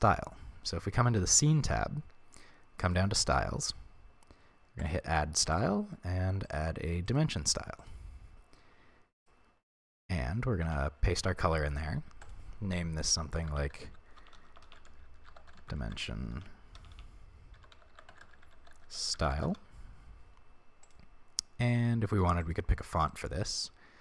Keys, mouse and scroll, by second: 1.3 click, 2.8 click, 3.6-4.8 scroll down 1, 4.8-9.2 drag, 8.2-9.2 scroll down 1, 9.6-10.7 scroll down 1, 10.7 ctrl+v, 12.2-20.9 drag, 14.3 BackSpace, 21.6 click, 22.1 click, 22.4 click, 23.2 right click.